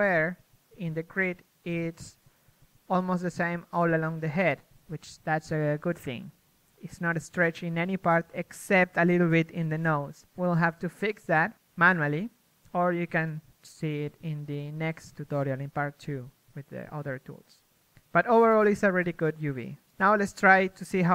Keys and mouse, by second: 0.0-1.7 typing, 3.0 KP_3, 4.2 KP_1, 4.6 Tab, 5.7 a, 15.6 KP_1.